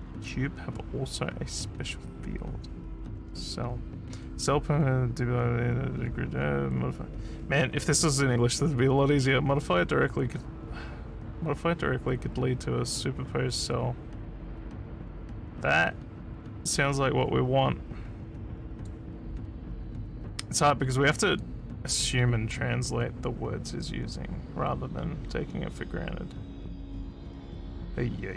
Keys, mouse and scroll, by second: 18.8 click, 21.4-28.3 drag.